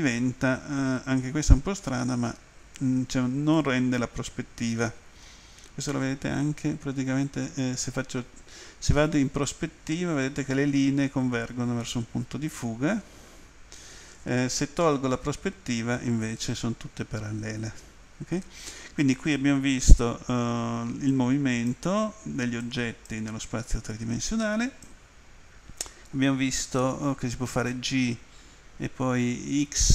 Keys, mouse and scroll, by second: 1.7 middle click, 3.6 middle click, 21.1 click, 22.7 click, 24.3 click, 29.7 x.